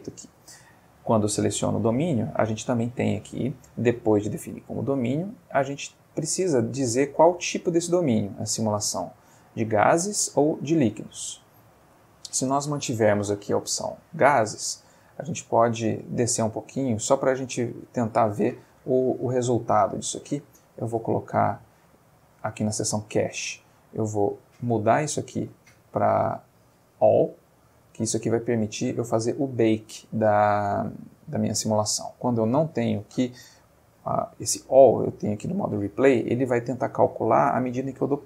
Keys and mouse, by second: 2.6 middle click, 5.8 click, 11.2 Escape, 14.7 middle click, 15.7 middle click, 19.7 middle click, 20.7 click, 22.1 click, 26.2 click, 27.4 click, 28.4-29.0 middle drag, 32.3 click, 32.9 click, 37.7-38.2 drag.